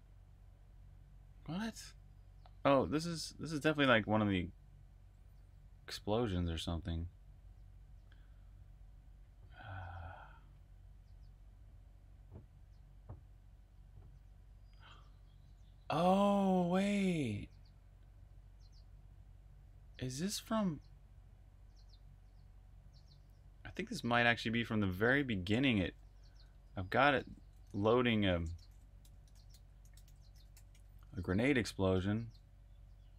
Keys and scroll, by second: 25.6 super+Tab, 27.0 super+Tab, 28.4 shift+super+f, 28.9-30.8 typing, 31.8 Return.